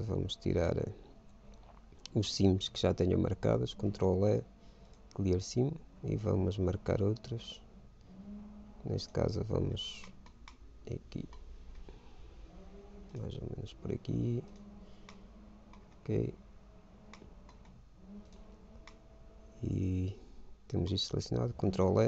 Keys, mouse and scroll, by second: 0.6 middle click, 3.5 ctrl+e, 6.4 a, 7.9-9.6 right drag, 9.9-13.6 middle drag, 13.6 click, 13.7-15.0 right drag, 15.0-17.2 middle drag, 17.4-18.7 middle drag, 18.7 right click, 19.4-21.2 middle drag, 21.8 ctrl+e.